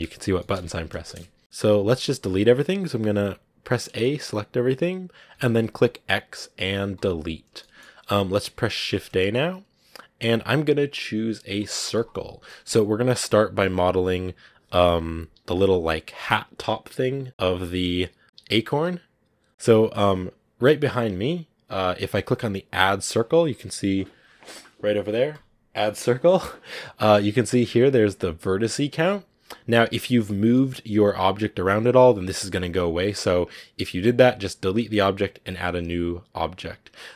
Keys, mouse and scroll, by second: 0.2 middle click, 0.4 n, 0.9 shift+middle click, 1.4 a, 3.9-5.2 shift+middle drag, 5.2 x, 7.5 shift+middle click, 7.8-8.8 scroll up 2, 8.8 shift+a, 19.5 scroll up 2, 25.2-37.1 drag.